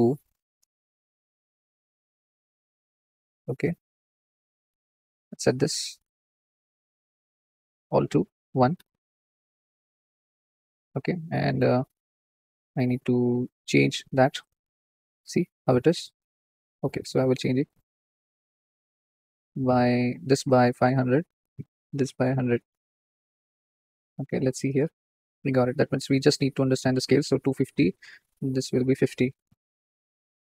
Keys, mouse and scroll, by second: 1.0-1.5 drag, 4.6-5.8 drag, 5.8 middle click, 6.1-7.5 drag, 7.5 middle click, 8.1-9.3 drag, 9.3 scroll down 3, 9.6 click, 9.6-14.2 middle drag, 12.7-14.4 drag, 14.9 scroll up 3, 18.4 KP_0, 21.9 click, 22.8 KP_0, 24.6 ctrl+shift+click, 25.7 middle click, 25.9 scroll up 4, 27.7-28.7 drag, 28.5 middle click, 29.2-30.5 drag.